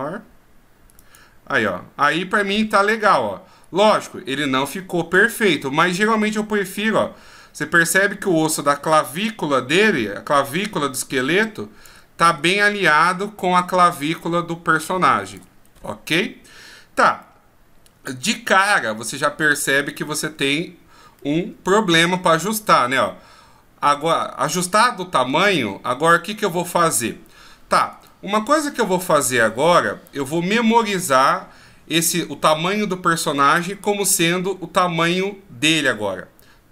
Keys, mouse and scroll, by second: 10.9 click, 21.2 middle click, 25.6-26.0 scroll down 2, 26.0-27.9 scroll up 1.